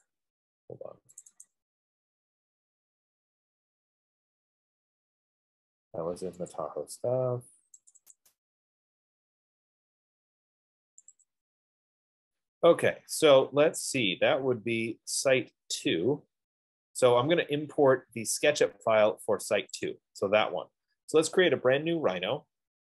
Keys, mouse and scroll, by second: 0.4 click, 1.4 click, 1.7 click, 6.9 click, 8.1 click, 8.5 click, 11.3 click, 11.8 click, 20.3 click, 21.8 F15.